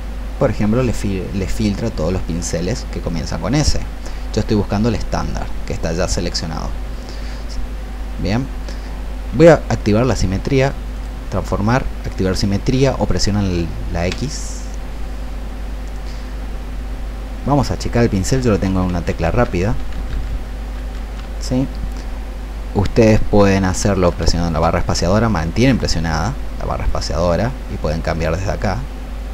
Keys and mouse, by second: 10.9 click, 14.0 x, 24.7 space, 28.5-29.3 drag.